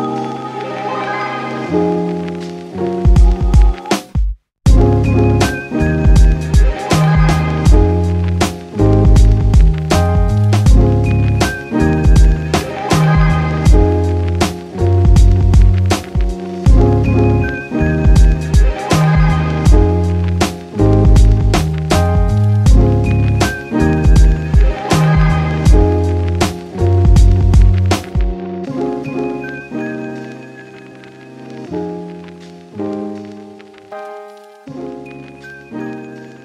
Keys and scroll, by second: 31.5 Return.